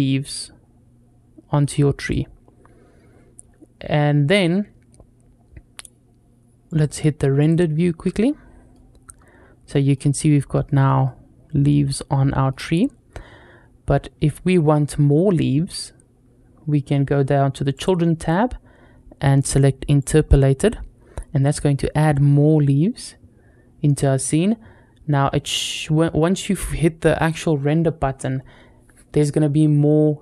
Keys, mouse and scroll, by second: 1.8 click, 2.9-3.4 scroll down 3, 6.7 click, 7.2 click, 8.0 middle click, 9.5 middle click, 10.1 scroll up 2, 10.5 shift+middle click, 10.9-12.4 middle drag, 17.6 click, 19.9 click, 21.0-22.1 middle drag.